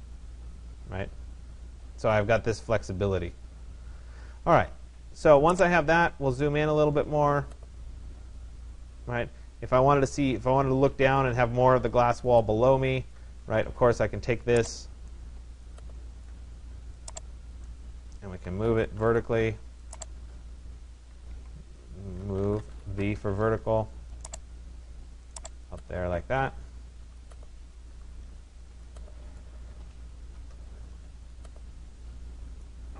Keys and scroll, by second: 18.5 Return, 21.4 Escape, 22.7 Return.